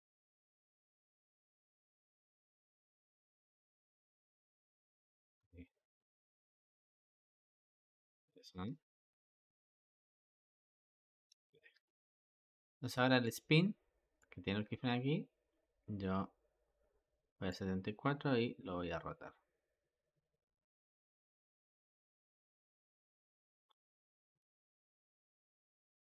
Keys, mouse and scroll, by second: 1.1 g, 4.4 i, 5.3-6.5 drag, 6.5 space, 11.0 Escape, 11.7-13.2 drag, 14.0-17.3 drag, 18.4 r, 25.0-26.1 drag.